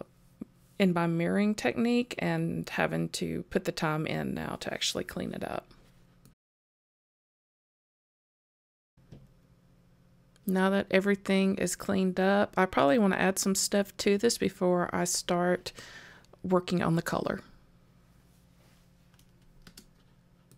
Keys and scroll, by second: 0.6 super+z, 0.9 super+j, 1.4 super+j, 2.4 super+j, 2.7 super+j, 3.3 super+j, 3.9 super+j, 4.1 super+z, 4.7 super+j, 5.4 super+z, 5.6 super+j, 6.3 super+j, 6.9 super+j, 7.2 super+j, 7.9 super+j, 8.2 super+j, 9.5 super+j, 9.9 super+j, 10.2 super+0, 13.7 super+s.